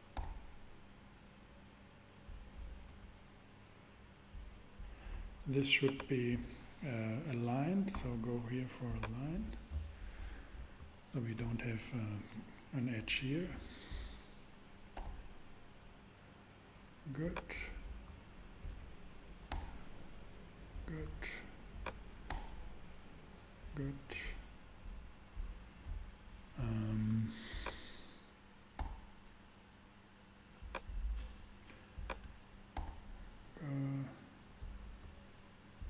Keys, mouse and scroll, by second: 0.1 g, 0.6 g, 7.9 super+v, 14.9 g, 15.0 g, 19.5 super+g, 22.3 g, 22.9 g, 28.8 g, 32.7 g, 33.3 g.